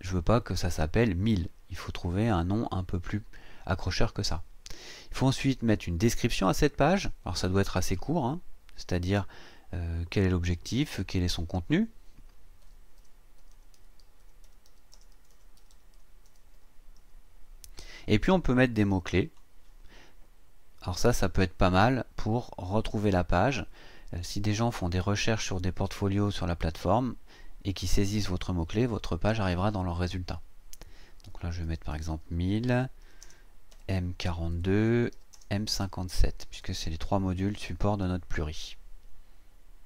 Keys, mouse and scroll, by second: 6.0 click, 12.4-17.5 typing, 19.2 click, 31.4-35.3 typing, 36.5 shift+m, 37.4 KP_5, 37.6 KP_7.